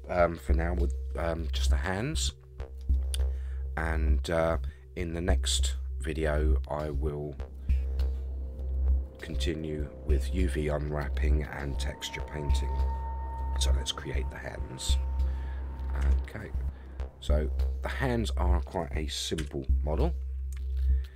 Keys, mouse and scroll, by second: 1.0 scroll up 3, 1.6-2.8 middle drag, 2.9-10.5 middle drag, 11.5-11.9 scroll down 3, 12.0-12.9 middle drag, 13.9-14.2 scroll up 3, 16.0 Tab, 16.8-18.6 middle drag, 19.4 KP_3, 20.7 shift+middle click.